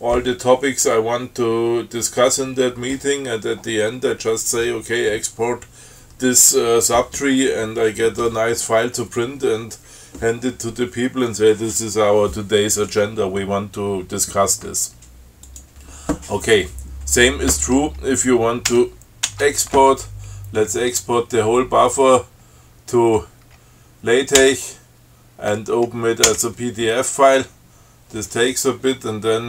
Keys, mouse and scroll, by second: 15.8 click, 19.0 ctrl+c, 19.5 ctrl+e, 24.6 l, 26.5 o.